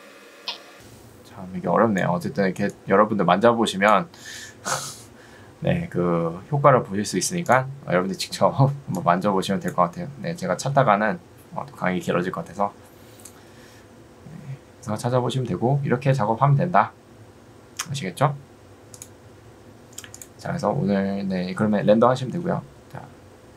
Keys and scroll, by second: 12.8 Escape.